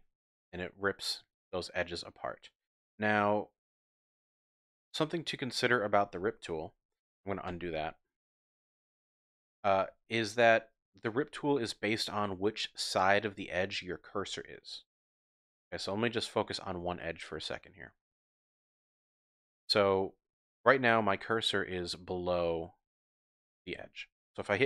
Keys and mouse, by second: 6.9 click, 7.5 ctrl+z, 10.2 shift+click, 15.9 click, 15.9 typing, 16.8 click, 17.0 middle click, 17.0 typing, 18.9 middle click, 19.8 click.